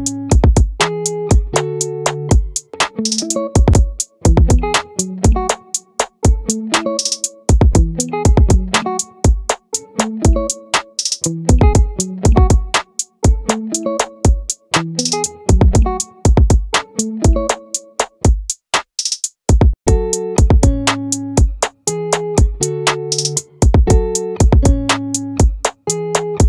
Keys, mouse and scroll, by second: 0.8 click, 2.2-3.4 right drag, 5.0-8.2 drag, 8.2 middle click, 8.9 click, 19.5-23.7 right drag.